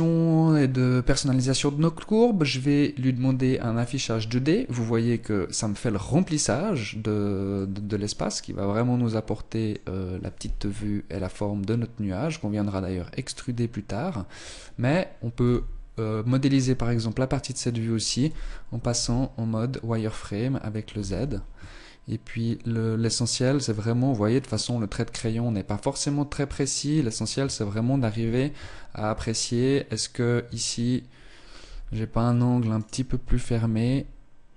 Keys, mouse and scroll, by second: 3.0 click, 7.5 middle click, 10.6 KP_1, 14.3 Tab, 15.1 z, 16.5 scroll up 1, 16.5 scroll down 2, 17.4-18.4 scroll up 1, 17.4 z, 18.9 z, 20.5-21.6 scroll down 1, 21.6 z, 27.0 Tab, 27.4 Tab, 28.1 z, 28.6 Tab, 30.5 Tab, 31.7 z, 32.7 right click, 33.8 g.